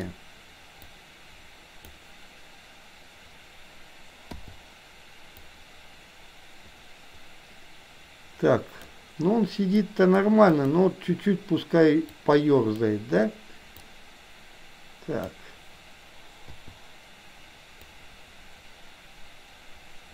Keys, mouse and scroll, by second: 0.9-1.9 drag, 4.4 i, 5.5-8.9 drag, 9.9 middle click, 10.5 click, 12.2 click, 13.9-15.2 drag, 16.5 i, 17.9-20.1 drag.